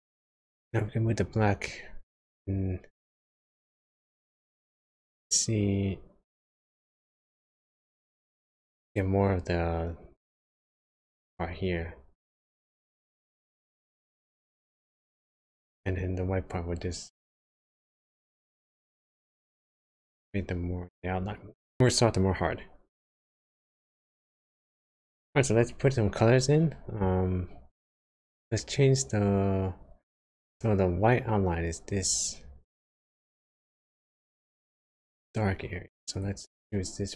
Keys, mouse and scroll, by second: 0.1 click, 1.6 click, 11.1 click, 15.8 click, 25.0 click, 32.3-32.7 scroll up 2, 33.1 shift+middle click, 36.1 click.